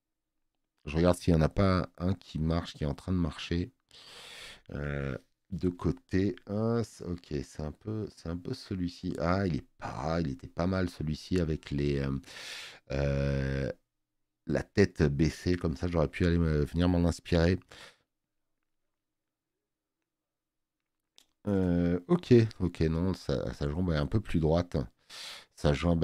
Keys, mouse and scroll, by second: 0.2-0.9 scroll down 3, 16.3 scroll down 2.